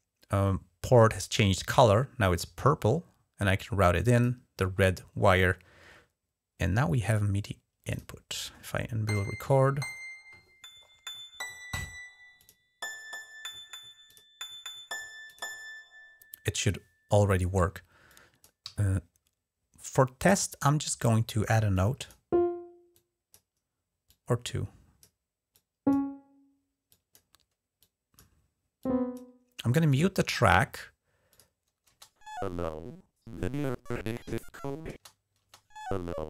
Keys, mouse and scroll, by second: 2.3-4.0 drag, 7.7 click, 12.1 click, 13.8 click, 15.0 click, 17.9 click, 18.4 d, 19.6-20.8 drag, 21.5 click, 22.7 click, 23.8 click, 25.3 click, 26.7-28.1 drag, 28.6-29.2 drag, 29.7-31.4 drag, 31.7 space, 34.7 space, 35.2 space.